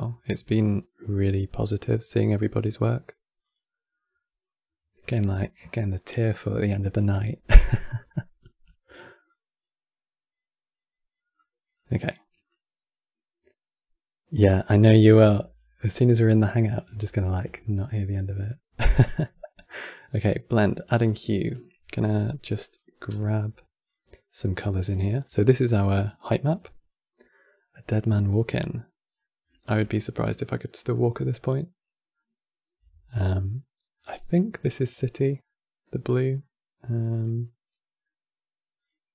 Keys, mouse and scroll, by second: 3.1-6.1 drag, 9.0-14.4 drag, 17.3-19.4 shift+middle drag, 19.4-21.5 drag, 21.5 e, 22.8 e, 24.3-24.7 scroll down 2, 24.7-27.7 shift+middle drag, 28.9-30.4 middle drag, 30.4 scroll down 2, 30.6-33.6 middle drag, 33.7 scroll up 3, 35.1-38.5 middle drag, 38.5 click.